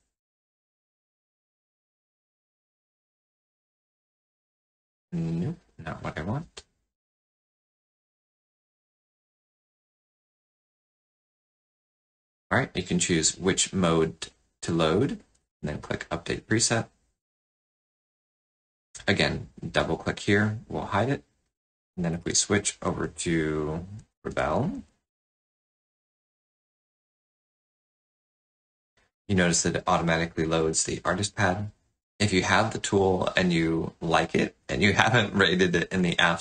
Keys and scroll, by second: 22.1 alt+Tab.